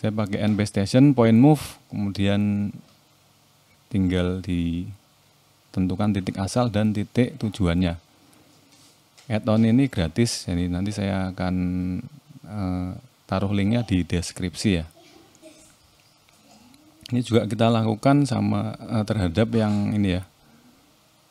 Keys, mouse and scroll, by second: 0.8 click, 5.9 click, 6.2 middle click, 9.5 click, 9.9 scroll down 1, 10.1 shift+middle click, 10.5 middle click, 11.5 click, 12.6 click, 17.4 r.